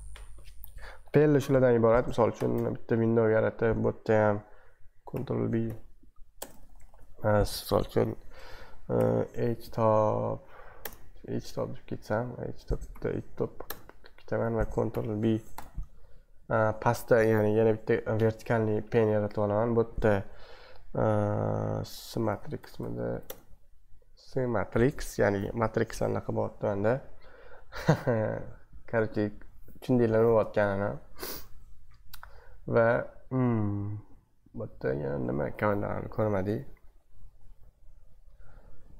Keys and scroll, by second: 2.3 ctrl+b, 2.5 c, 5.1 ctrl+b, 5.6-6.9 typing, 8.7-10.0 typing, 10.8 Return, 12.9-15.5 typing, 22.0-23.6 typing, 31.4 super+2.